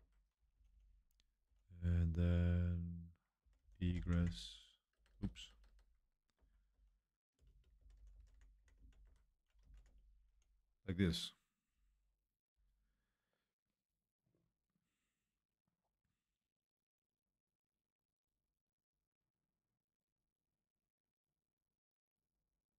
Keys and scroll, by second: 2.5-10.2 typing, 7.5 Escape.